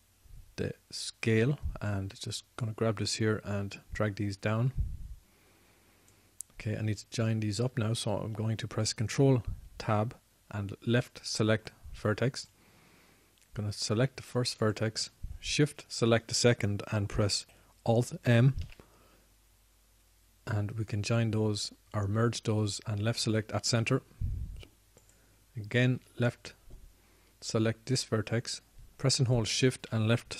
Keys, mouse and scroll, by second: 3.9-5.9 drag, 8.8 ctrl+Tab, 13.7-14.8 drag, 19.8 alt+m.